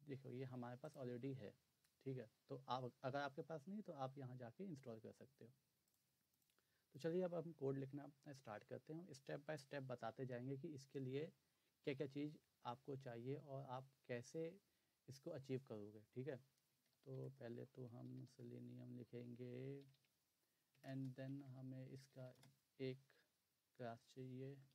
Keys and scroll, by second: 16.5-18.7 typing, 19.8 Down, 20.0 Down, 20.7 Return, 20.9-22.6 typing, 24.3-24.7 typing.